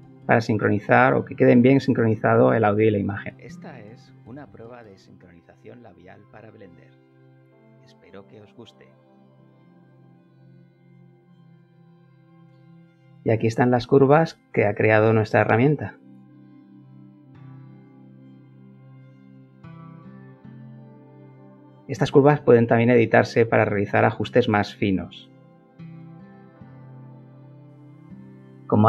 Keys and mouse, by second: 0.5 click, 2.7 space, 10.8 Escape, 12.7-14.0 drag, 14.4 middle click, 14.5-16.4 middle drag, 16.7 middle click, 16.8 middle click, 17.0 middle click, 17.3-20.5 middle drag, 20.8 middle click, 21.5 shift+middle click.